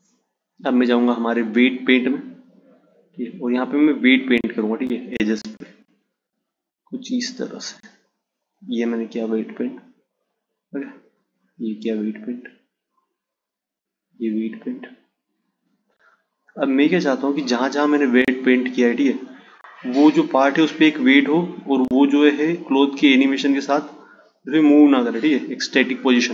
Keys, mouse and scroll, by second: 3.1-6.1 drag, 7.0-10.1 drag, 10.5-16.2 drag, 16.3-19.3 drag.